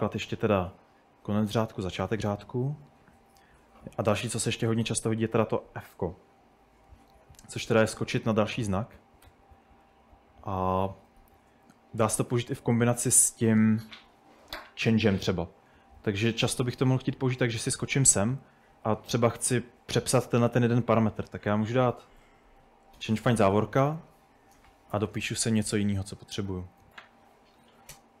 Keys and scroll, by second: 0.2-0.8 typing, 3.5-9.5 typing, 11.1-18.0 typing, 19.5-20.2 typing, 22.0-28.2 typing.